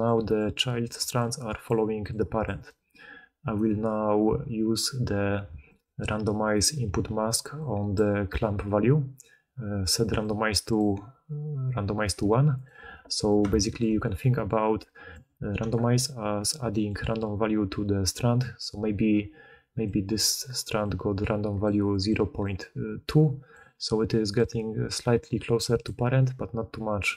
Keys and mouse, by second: 0.9-2.5 d, 3.5 d, 3.6 d, 11.0-12.6 drag, 11.0-21.5 right drag, 18.3-22.3 d, 19.7-21.5 drag, 20.2-21.5 middle drag, 23.5-27.1 typing.